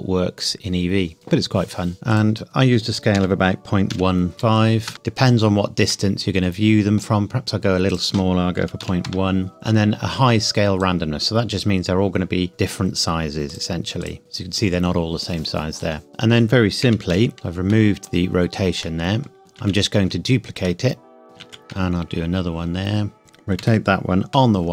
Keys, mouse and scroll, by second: 2.1 click, 3.1 KP_Decimal, 3.9 KP_1, 4.3 KP_5, 4.8 KP_Enter, 4.9 middle click, 5.0-5.9 scroll down 1, 5.9 middle click, 7.9 click, 8.6 KP_Decimal, 8.8 KP_1, 9.0 KP_Enter, 9.5 middle click, 10.7 click, 16.1 click, 16.9 KP_Decimal, 17.1 KP_1, 17.3-17.7 scroll down 1, 17.7 middle click, 19.4 scroll down 1, 19.6 shift+d, 21.2 click, 21.7 shift+d, 23.2 Escape, 23.6 r, 24.3 y.